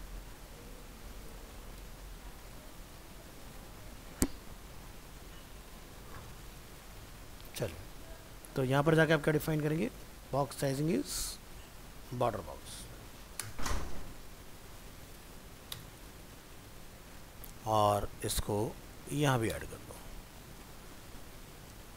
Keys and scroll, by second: 3.9 ctrl+v, 17.4 ctrl+c, 19.7 ctrl+v.